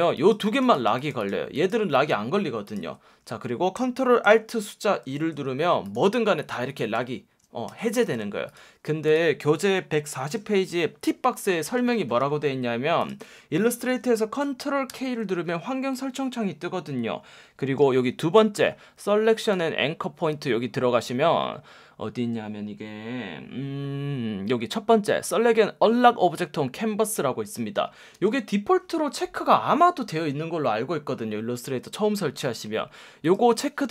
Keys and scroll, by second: 5.0 alt+super+2, 7.7 super+z, 14.9 super+k, 18.5 F1, 28.1 F1.